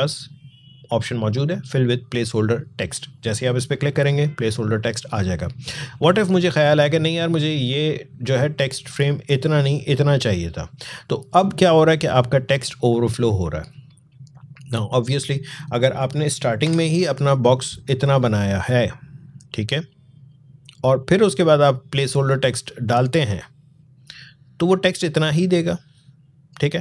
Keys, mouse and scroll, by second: 3.1 click, 5.8-12.3 drag, 15.8 click, 16.5 Delete, 19.4 click, 21.8-23.7 drag, 23.7 right click, 25.7 click.